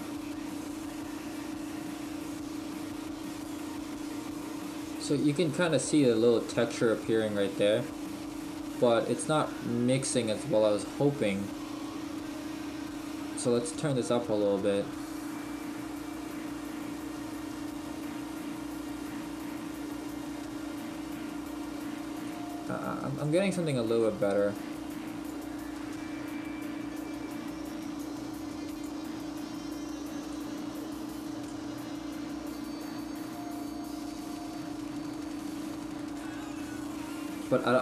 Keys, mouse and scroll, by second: 12.1 click, 22.5 click, 28.1 click, 30.5 click, 37.1-37.8 scroll down 2.